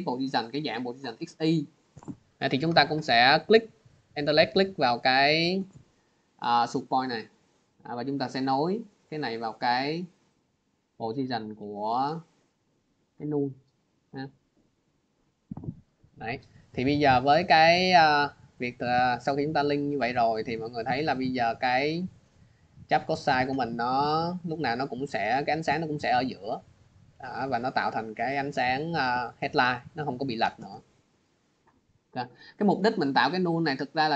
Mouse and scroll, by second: 4.3 alt+click, 9.1 alt+click, 9.3 click, 13.2 click, 14.4 click, 17.3 click, 18.6 click, 20.1 click, 21.6 click, 22.4 click, 24.0 click, 26.5 click, 28.2 click, 29.5 click, 30.1 click, 31.2 scroll, 32.4 click, 33.9 click.